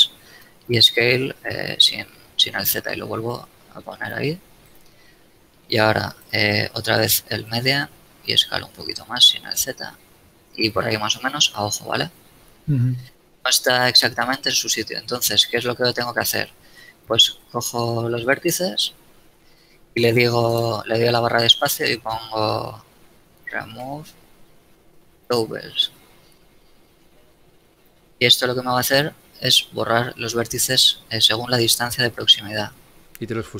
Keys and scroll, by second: 0.1 s, 0.7 shift+z, 8.1 s, 8.8 shift+z, 12.8 shift+z, 16.4 shift+a, 17.4 ctrl+Tab, 20.1 space, 23.8 e, 24.5 space, 24.8 o.